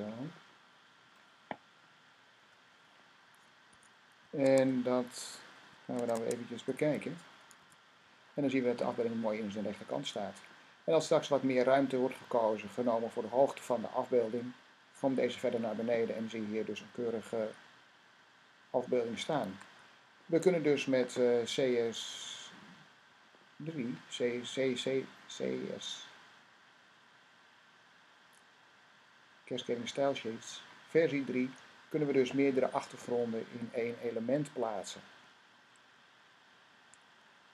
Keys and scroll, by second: 1.6 typing, 3.5 s, 4.3 Tab, 5.8 Tab, 6.0 Tab, 7.4 r, 19.3 Tab.